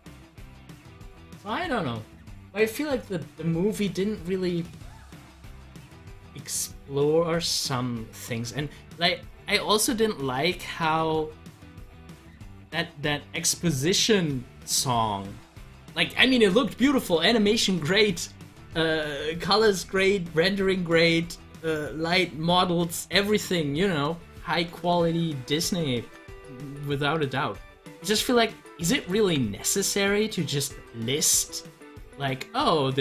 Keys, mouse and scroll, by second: 24.8 click, 26.0 ctrl+z, 29.2 z, 29.8-33.0 drag.